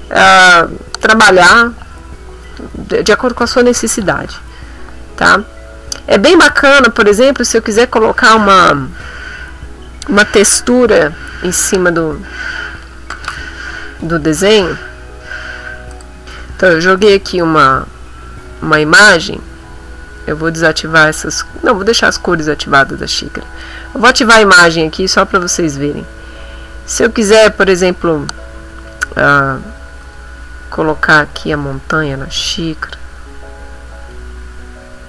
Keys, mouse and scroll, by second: 7.6 middle click, 16.0 right click, 23.5 click, 24.1 middle click, 24.9 ctrl+middle click, 25.8 ctrl+middle click, 30.0 click, 30.8-35.0 drag.